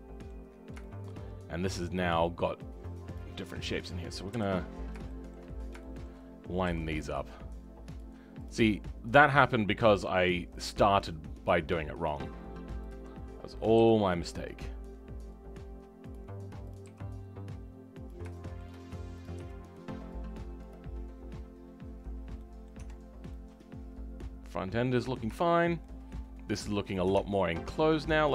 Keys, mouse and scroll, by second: 0.4-0.8 scroll down 5, 0.8 shift+middle click, 1.3-3.1 scroll up 3, 3.1-4.7 drag, 4.7-5.0 scroll up 4, 5.0 shift+middle click, 5.8 shift+middle click, 6.6 g, 8.4 click, 8.6 g, 11.2-12.9 scroll down 5, 12.9 click, 16.7 click, 16.8 g, 18.3 shift+middle click, 19.2 click, 20.9-21.8 scroll down 2, 21.8-22.3 scroll up 2, 22.3 middle click, 22.7 Tab, 22.9-23.3 scroll down 2, 23.3-25.0 middle drag, 25.0-25.3 scroll up 2, 25.3 shift+middle click.